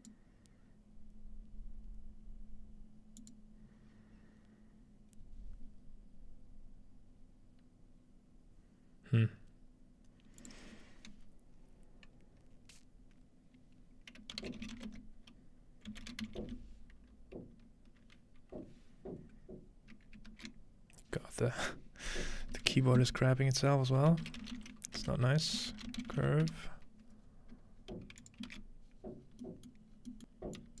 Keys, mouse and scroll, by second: 15.7 typing, 17.5-18.2 typing, 19.6-20.7 typing, 25.7 typing, 29.7 shift+middle click, 29.7-30.2 scroll down 1, 30.2-30.8 middle drag.